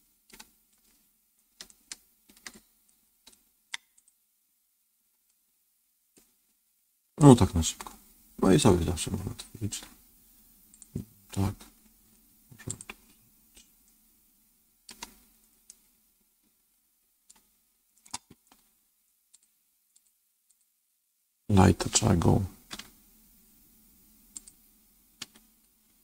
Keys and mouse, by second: 1.6 shift+middle click, 3.2 middle click, 3.9 click, 5.2-6.4 middle drag, 7.1-8.5 middle drag, 12.6 click, 13.7-14.8 middle drag, 15.7-17.2 middle drag, 19.3 click, 19.9 click, 20.4 click.